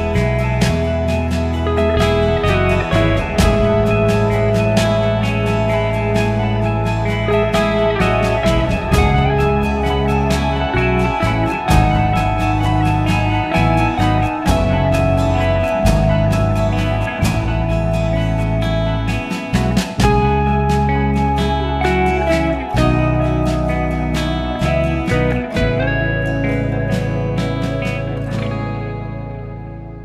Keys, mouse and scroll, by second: 0.8 s, 2.1 click, 3.2 g, 6.7 click, 8.8 g, 10.5 click, 10.7 g, 13.6 click, 13.8 g, 15.5 s, 18.7 click, 19.0 g, 19.9 click, 20.3 g, 21.5 click, 21.7 g, 22.4 s, 23.2 g, 24.7 click, 26.1 g, 27.6 click, 28.2 click, 28.3 s, 29.2 g, 29.7 s.